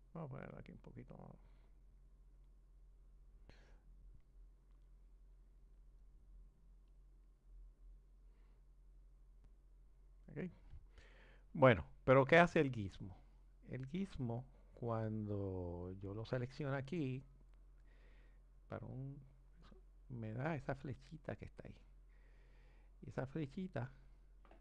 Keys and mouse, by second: 0.4 click, 4.4 click, 6.3 click, 9.2 click, 18.9-19.9 drag.